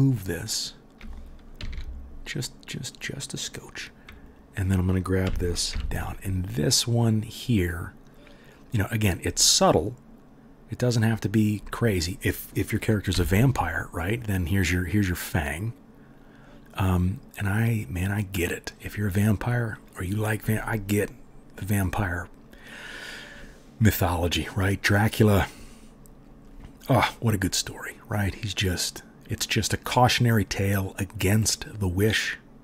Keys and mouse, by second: 1.0-4.3 drag, 1.5 g, 4.3-4.7 middle drag, 4.7-32.6 drag, 5.2 g, 13.1 g.